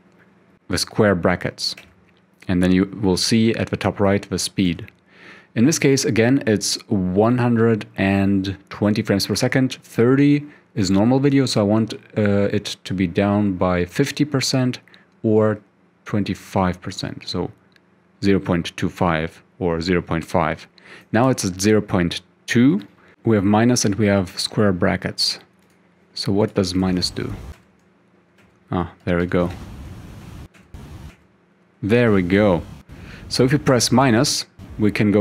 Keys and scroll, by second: 1.8 [, 4.7 [, 21.4 [, 22.9-23.6 typing, 27.6-30.1 typing, 31.8-34.2 typing.